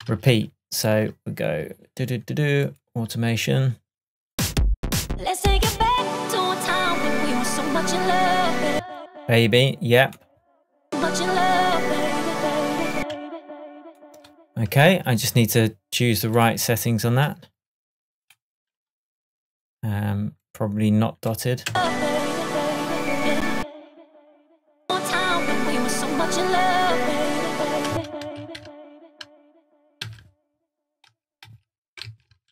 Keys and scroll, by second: 0.1 super+z, 8.8 space, 13.0 space, 21.7 space, 23.6 space, 27.9 space.